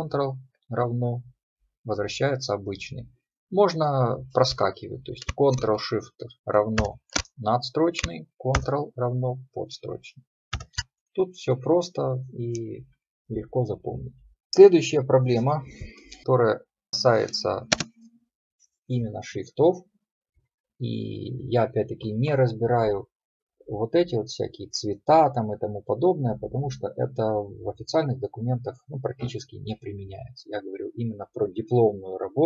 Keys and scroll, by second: 6.8 ctrl+shift+=, 8.6 ctrl+=, 10.6 ctrl+=.